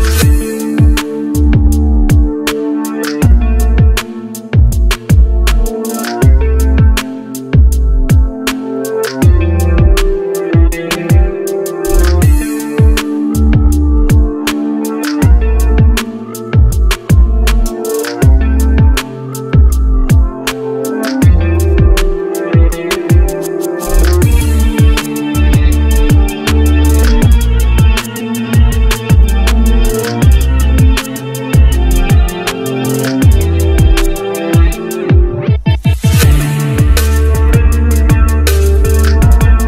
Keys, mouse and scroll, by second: 2.1 double click, 11.5-12.7 scroll up 1, 35.2 scroll down 1, 35.7-39.3 scroll up 1.